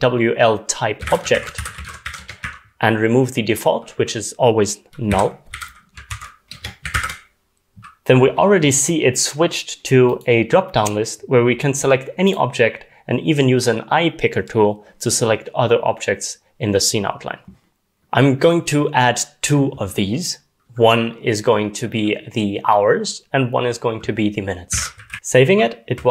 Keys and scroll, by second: 0.8-2.5 typing, 5.1-6.6 typing, 7.0 ctrl+s, 24.5-25.9 typing.